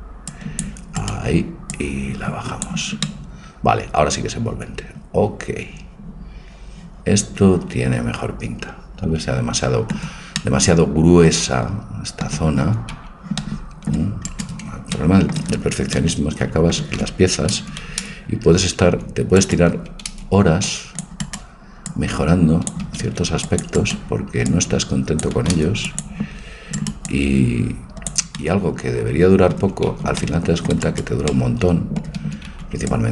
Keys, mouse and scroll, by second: 1.7-3.7 drag, 3.1-5.0 middle drag, 10.4-12.6 middle drag, 12.6 a, 12.9 c, 15.0 middle click, 17.5 a, 18.0 c, 19.7 a, 20.1 c, 21.9-23.8 drag, 22.9 a, 23.0 c, 24.5-26.5 drag, 25.4 a, 25.6 c, 27.0-28.6 drag, 30.0 c, 32.2 a, 32.5 c.